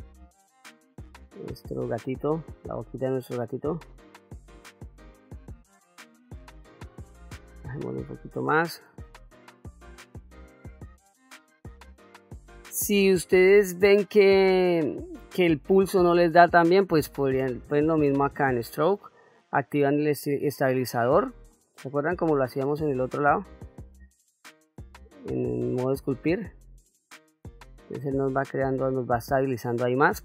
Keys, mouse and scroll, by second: 8.7 shift+f, 9.4-10.4 drag, 10.7 middle click, 11.8 middle click, 18.4-24.9 drag, 26.3-28.4 drag, 29.0 click, 30.1-30.2 drag.